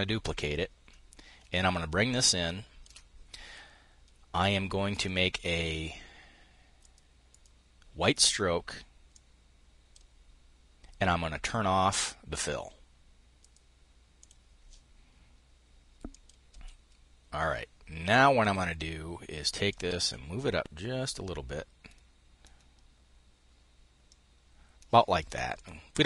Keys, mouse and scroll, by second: 0.0 click, 1.2-2.6 ctrl+shift+drag, 6.4 click, 6.9 click, 8.7-9.7 drag, 13.0 click, 13.8 click, 15.7 click, 18.0 click, 19.3-26.0 ctrl+shift+drag.